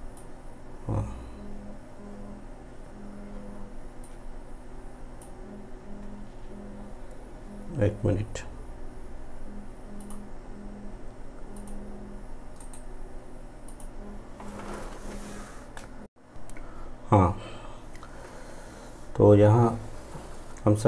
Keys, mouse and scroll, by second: 4.1-10.0 drag, 12.7 right click, 13.7 click.